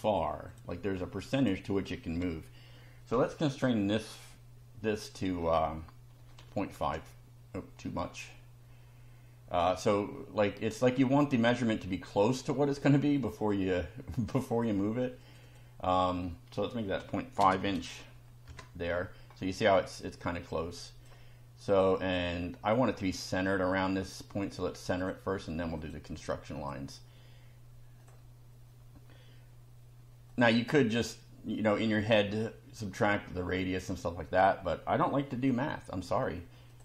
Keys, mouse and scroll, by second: 0.5 click, 1.4 click, 3.6 click, 6.1 ., 6.4 5, 6.8 Return, 10.7 click, 12.3 click, 13.1 click, 14.3 click, 15.2 click, 16.7-17.9 typing, 18.5 Return, 20.2 click, 23.3 right click, 25.0 click, 25.8 click, 26.6 click, 28.0 click, 30.3 click, 34.3 click, 35.3 Delete, 36.7 click.